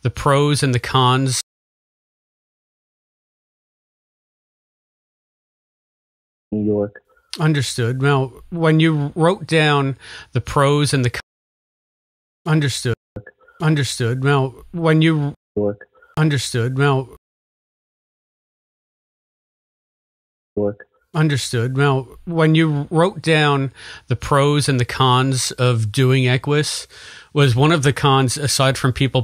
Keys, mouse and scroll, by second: 0.5 click, 1.3 space, 1.4 click, 2.1 click, 3.4 click, 4.5 click, 6.4 click, 6.4 space, 7.0 click, 7.6 click, 8.5 click, 9.7-11.1 drag, 11.1 space, 11.9 ctrl+shift+Delete, 12.4 space, 12.8 space, 13.0 click, 13.1 space, 14.2 click, 14.6 click, 15.2 space, 15.4 click, 15.4 space, 16.9 click, 17.1 space, 18.4 Delete, 18.8 click, 19.3 click, 20.3 click, 22.3 ctrl+s, 28.9-29.2 drag.